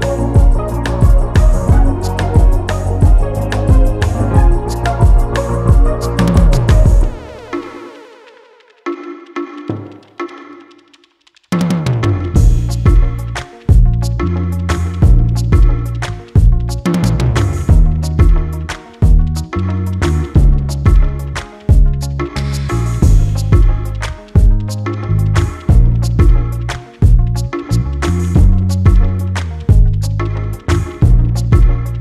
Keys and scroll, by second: 19.3 ctrl+t, 26.2 Return.